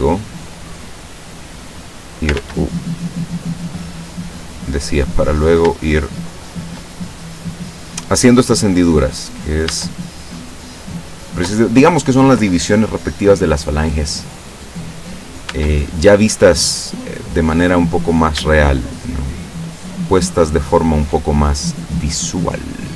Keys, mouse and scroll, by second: 0.2 shift+middle click, 1.6 click, 2.4 ctrl+z, 3.0 ctrl+middle click, 4.2 middle click, 5.3 right click, 6.0 shift+right click, 6.6 shift+right click, 7.0 shift+middle click, 8.3-9.9 drag, 9.7 Tab, 10.1-11.8 middle drag, 12.4-15.1 middle drag, 15.5 Tab, 16.5-17.7 middle drag, 18.1 right click, 18.5 shift+right click, 19.0 shift+right click, 19.9 shift+right click, 20.4 shift+right click, 20.8 shift+right click, 21.7-22.9 drag.